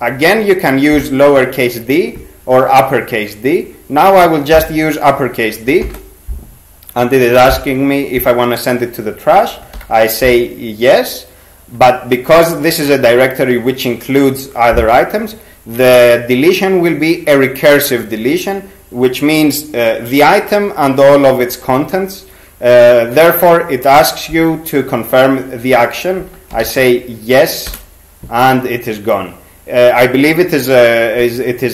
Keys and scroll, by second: 5.8 shift+d, 9.8 y, 26.3-27.3 typing, 27.7 Return.